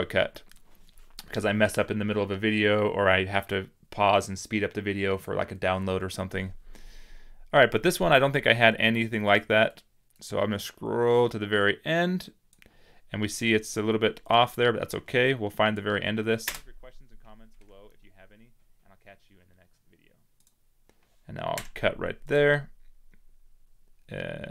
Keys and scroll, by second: 21.4 c.